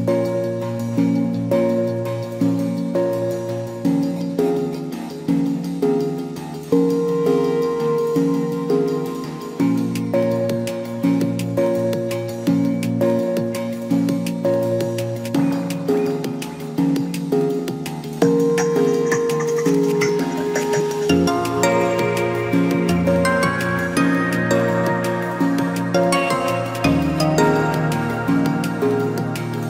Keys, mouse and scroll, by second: 0.1 scroll down 1, 0.4 3, 0.6 click, 1.4 click, 1.6 middle click, 2.1 shift+click, 2.3 scroll up 1, 2.5 x, 3.9 KP_1, 4.4 2, 4.8-5.2 middle drag, 5.2 drag, 5.6 shift+drag, 6.0 shift+click, 6.2 shift+click, 6.4-7.0 scroll up 1, 7.0 ctrl+b, 10.3 scroll down 2, 10.4 Tab, 10.7 Tab, 11.3 2, 11.5 click, 11.6 click, 12.1 shift+click, 13.6 KP_1, 14.0 scroll up 2, 14.2 scroll down 1, 14.5 e, 14.7 s, 20.3-21.5 drag, 21.5 s, 25.7 KP_7, 26.2 scroll down 2, 26.3 scroll up 1, 26.6-27.9 right drag, 27.9-28.9 scroll up 1, 28.9 scroll up 3, 29.0 scroll down 2, 29.2 r.